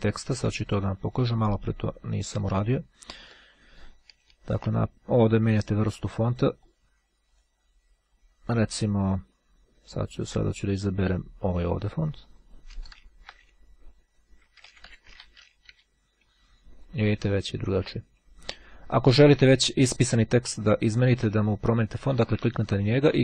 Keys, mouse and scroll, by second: 2.3 click, 3.4 click, 5.9 click, 6.9 click, 7.5 click, 11.5 click, 14.1-15.8 typing, 17.8 click, 19.0-20.1 drag, 22.6 click.